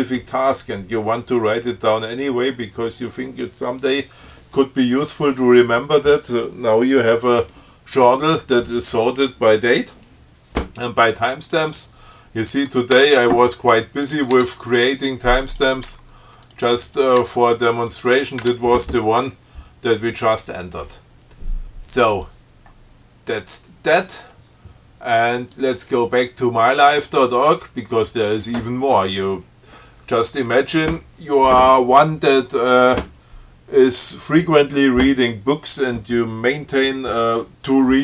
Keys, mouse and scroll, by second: 11.8 click, 13.2 Tab, 14.2 click, 14.6 Tab, 15.7 click, 16.1 Tab, 16.7 click, 17.2 click, 17.5 Tab, 18.1 click, 18.7 Tab, 22.4 click, 25.8 click.